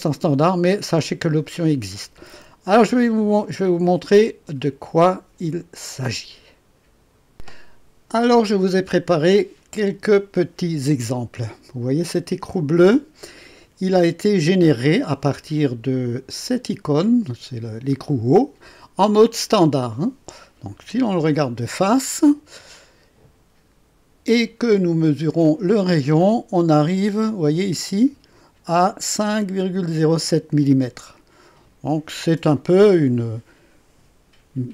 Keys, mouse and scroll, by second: 4.2 click, 12.4 click, 20.7 KP_1, 22.1-22.6 scroll up 4, 22.7 right click, 24.7-25.0 scroll up 1.